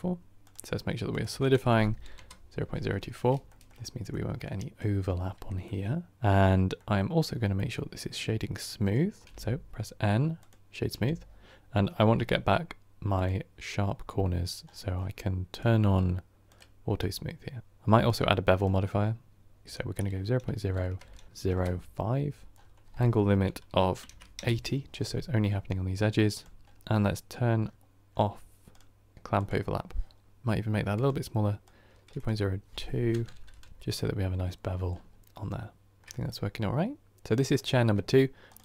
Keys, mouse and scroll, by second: 2.1 click, 3.0-3.4 scroll up 3, 3.4 shift+middle drag, 3.6-4.0 scroll up 3, 4.0-10.3 middle drag, 10.3-16.4 drag, 24.4-29.4 drag, 33.7-34.5 drag, 34.5-35.2 scroll down 8, 35.2-38.6 middle drag.